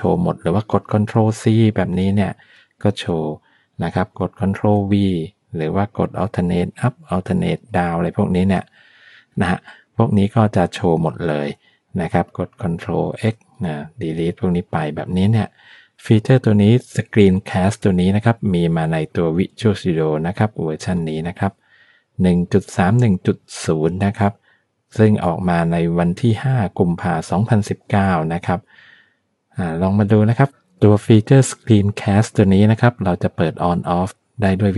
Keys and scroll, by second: 1.7 ctrl+c, 2.8 Down, 4.5 ctrl+v, 6.6 alt+Up, 7.7 alt+Down, 10.3 Up, 13.1 ctrl+x.